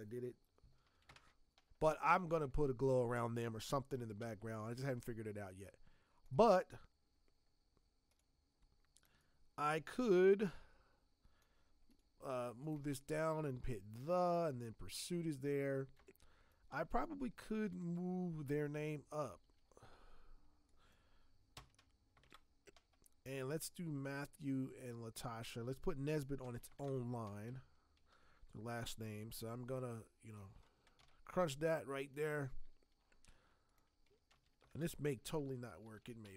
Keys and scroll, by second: 4.2 v, 15.9 space, 19.9 t, 22.2 ctrl+Return, 26.4 ctrl+x, 26.7 ctrl+Return, 27.9 ctrl+t, 30.9 v, 33.1 t, 34.3 ctrl+v, 34.7 ctrl+Return, 35.8 ctrl+t.